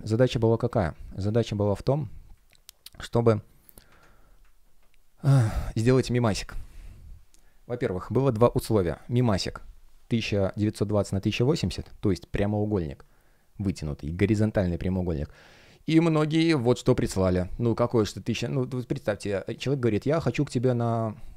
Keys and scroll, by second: 0.1 space, 2.2 space, 3.8 super+\, 4.9 space, 17.8 space.